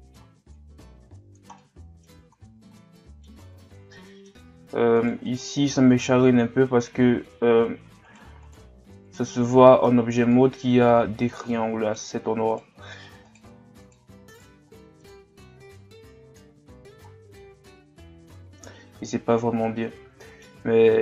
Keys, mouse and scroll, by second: 0.6-1.6 drag, 1.6 middle click, 2.2 Tab, 2.7-3.5 middle drag, 3.5 Tab, 3.9 middle click, 4.5 scroll up 1, 5.0 right click, 5.3-8.1 middle drag, 8.1 shift+right click, 8.5 shift+right click, 9.1 shift+right click, 9.4 middle click, 10.3-11.5 drag, 11.5 middle click, 12.5 right click, 13.3 shift+right click, 13.8 shift+right click, 14.3 shift+right click, 14.7 middle click, 15.7 click, 16.6 Tab, 17.1 scroll down 2, 17.4-20.6 middle drag, 20.6-20.9 scroll up 2, 20.9 Tab.